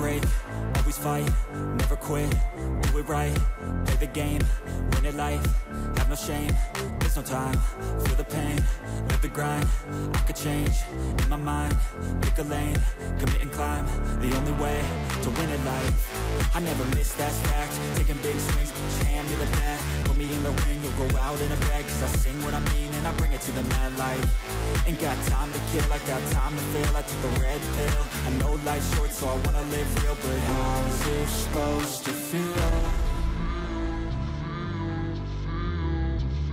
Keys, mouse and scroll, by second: 15.1-16.1 scroll down 8, 17.7 scroll down 1, 27.0 6, 27.9 3, 30.7 space, 32.1-36.5 typing.